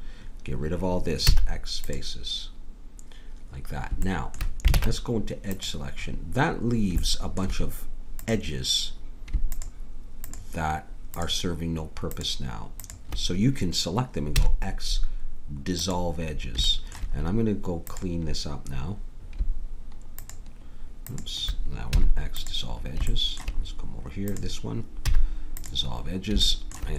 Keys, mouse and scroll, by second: 1.3 x, 4.7 ctrl+Tab, 8.3-15.9 drag, 14.4 x, 16.2 middle click, 17.2 middle click, 17.9-19.8 drag, 20.2 click, 21.9 x, 25.1 x.